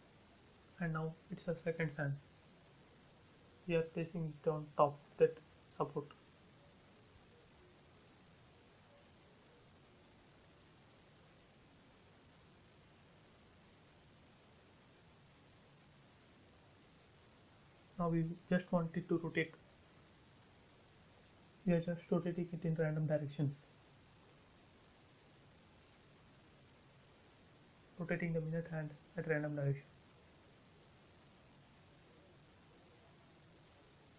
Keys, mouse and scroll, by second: 1.1 m, 3.0 click, 4.0 Up, 5.1 click, 5.2 click, 5.6 shift+middle click, 6.2 scroll up 1, 7.5 middle click, 8.6 click, 10.3 Up, 12.6 k, 13.9 click, 14.0-14.9 typing, 15.2 middle click, 15.6-16.0 scroll down 1, 16.3 space, 16.4-17.0 scroll down 2, 17.6 scroll up 1, 19.3 q, 20.9 click, 24.7 click, 24.9 space, 25.5 click, 26.5 q, 27.4 click, 31.3 click, 31.6 space, 32.1 click, 32.1 click, 33.0 q, 33.9 click.